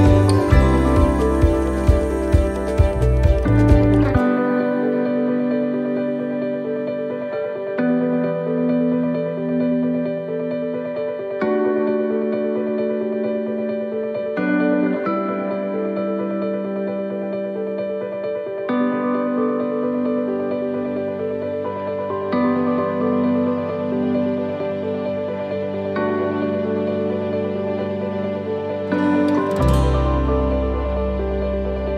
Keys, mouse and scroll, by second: 4.0 right click, 5.2 shift+d, 7.1 click, 17.9 click, 22.7 ctrl+shift+t.